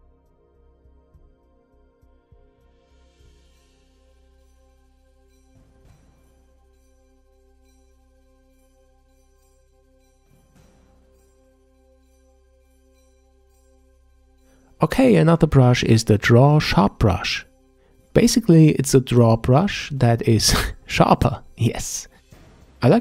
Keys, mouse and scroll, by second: 0.5 f, 1.2-3.7 drag, 4.0-6.9 drag, 6.9-7.7 middle drag, 7.7 click, 8.1 f, 8.7 click, 9.4-10.4 middle drag, 10.5-12.3 drag, 12.3 middle click, 13.1-14.1 shift+drag, 14.4 scroll up 2, 14.5 shift+click, 18.3 click, 19.7-22.9 ctrl+middle drag, 22.9 f.